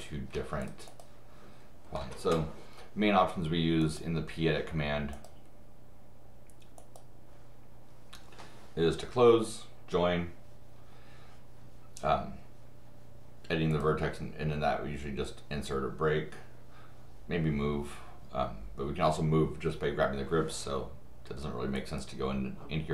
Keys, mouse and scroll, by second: 0.3 Escape, 0.6 click, 0.9 click, 3.8 click, 5.1 click, 6.8 click, 13.7 click, 21.7-22.9 drag.